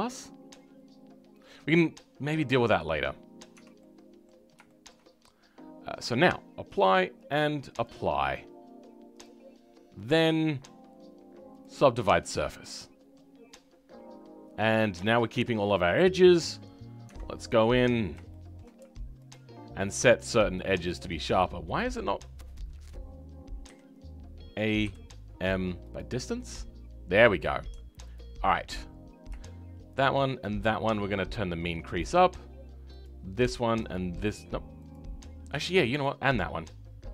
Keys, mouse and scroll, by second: 2.2-3.1 scroll down 11, 3.5 Tab, 3.8 middle click, 4.4 scroll down 2, 4.6-6.7 shift+middle drag, 6.7-11.9 drag, 11.9-12.3 scroll up 4, 12.3-17.0 middle drag, 17.0 Tab, 17.3-17.8 scroll up 2, 17.8-18.3 scroll down 1, 18.3-19.3 shift+middle drag, 19.3 alt+click, 20.7 alt+click, 23.6 a, 28.1 alt+click, 31.4-33.0 drag, 34.9 alt+click, 35.9 alt+shift+click.